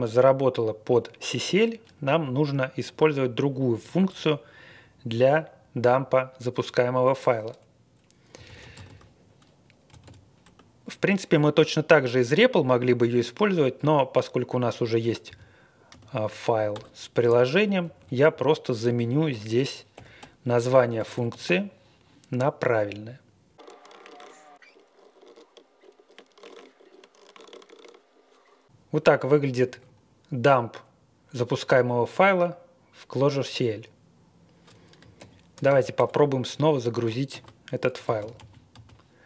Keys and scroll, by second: 8.1-10.4 typing, 15.3 typing, 15.9 Tab, 16.7 Return, 17.4 Page_Down, 17.8 Page_Up, 18.3 Left, 18.8 Left, 19.2 Right, 19.9-21.4 typing, 23.3-28.4 typing, 29.5 Tab, 29.6 Tab, 29.8 Tab, 34.9-36.2 typing, 37.3 ctrl+r, 37.8-39.2 typing.